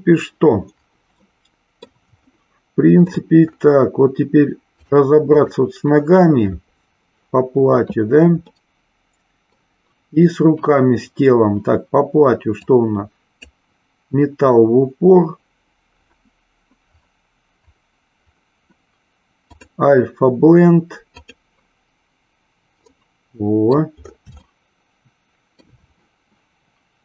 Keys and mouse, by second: 1.3 middle click, 2.2-3.2 shift+middle drag, 4.7 click, 5.3 click, 8.6-9.7 middle drag, 12.7-16.2 drag, 19.4-21.4 drag, 22.8-23.8 middle drag, 24.6-25.7 shift+middle drag.